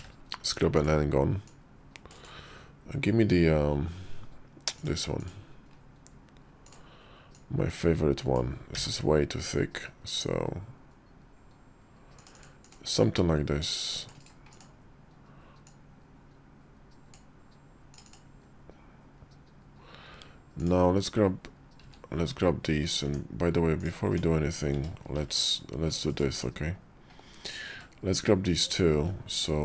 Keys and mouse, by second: 1.4 click, 4.6 click, 6.5 click, 7.2-8.3 drag, 12.5 click, 13.5 click, 14.4 click, 15.5-17.1 drag, 21.7 q, 22.9 Tab, 23.9 Tab, 25.0 ctrl+r, 26.1 Tab, 27.3 click, 27.6 q.